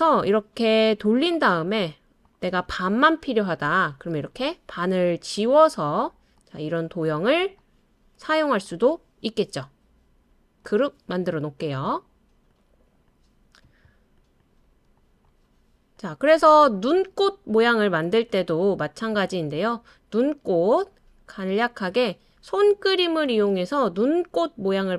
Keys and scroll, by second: 3.7 BackSpace.